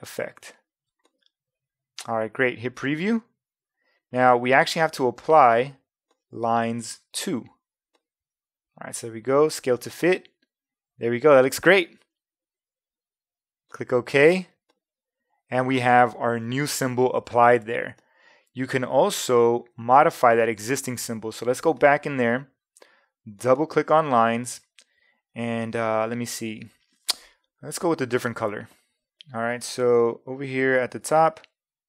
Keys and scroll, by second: 31.0 a.